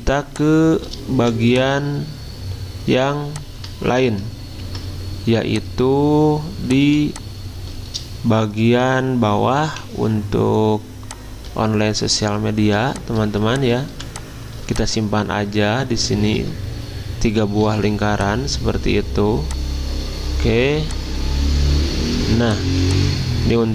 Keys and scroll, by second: 4.6 ctrl+g, 7.0 i, 17.6 ctrl+d, 22.6 z.